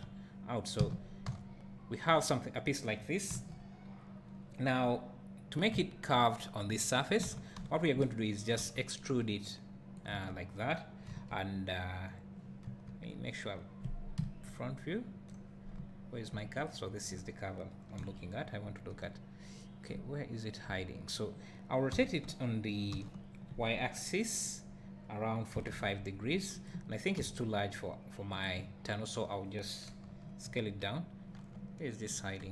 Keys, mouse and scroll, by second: 0.8 f, 1.3 Tab, 3.3 KP_1, 4.4 scroll down 1, 5.7 `, 7.3 Tab, 7.6 a, 8.6 e, 10.1 click, 11.1 KP_1, 12.4 scroll down 1, 12.7 KP_7, 14.2 KP_1, 15.8 `, 16.7 click, 18.0 KP_1, 18.6 scroll up 1, 19.9 `, 21.0-21.9 scroll up 1, 21.9 r, 26.8 click, 27.2 s, 28.4 click, 30.1 KP_1, 31.3 scroll down 1.